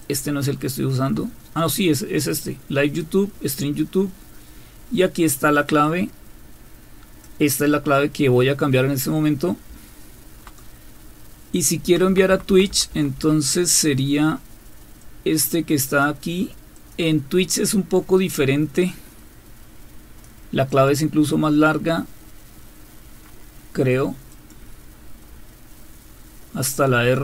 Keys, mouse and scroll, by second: 0.0 click, 0.6 End, 5.8-7.3 drag, 9.7 End, 10.3 Down, 10.6 Down, 11.8 Down, 12.1 Down, 12.3 Down, 12.5 Down, 12.7 Down, 13.1 Down, 13.1 Down, 15.0-16.0 drag, 16.3 click, 24.3 click, 25.0 Right, 27.0 Left.